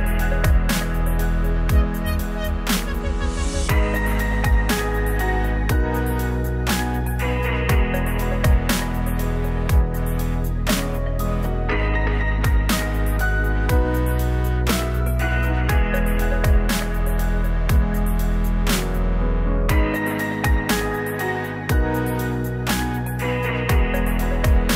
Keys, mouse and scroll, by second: 0.3 click, 2.5 click, 8.2-9.8 drag, 10.5-11.2 right drag, 11.3 Tab, 12.0 shift+s, 12.7-14.1 drag, 14.1 s, 15.5-17.3 drag, 17.5 click, 17.6 right click, 18.3 click, 19.9 click, 21.1 click, 21.5 m, 23.9 right click, 24.0 Tab, 24.3 Tab.